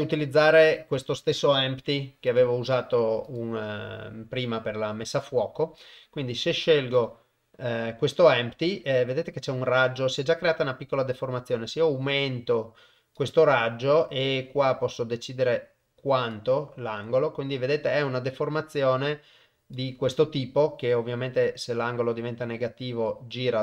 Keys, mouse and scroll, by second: 0.0 click, 0.6 click, 1.7 g, 3.3 click, 5.1 click, 10.2-13.2 drag, 14.0-16.4 drag, 18.4-19.7 drag, 21.4-23.1 drag.